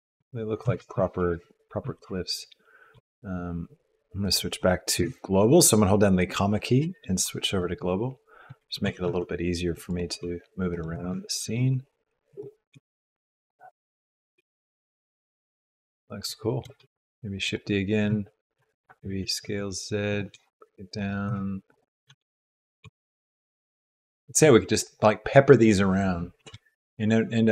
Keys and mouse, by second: 0.6 r, 5.0 ,, 8.8 g, 10.1 g, 10.9 r, 12.7 g, 13.7 s, 14.3 g, 14.6 s, 17.0 shift+d, 18.0 z, 19.2 s, 20.3 g, 21.2 r, 22.0 s, 22.8 g, 26.3 r.